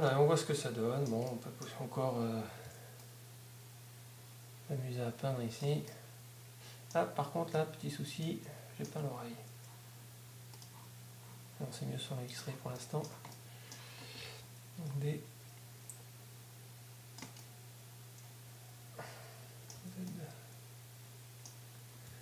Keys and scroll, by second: 15.8 d, 21.8 z.